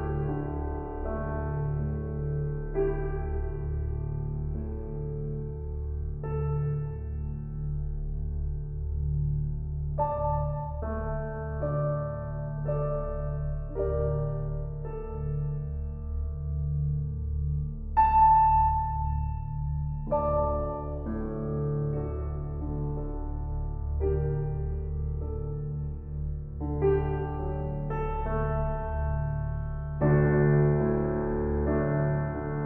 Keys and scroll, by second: 20.1 ctrl+t.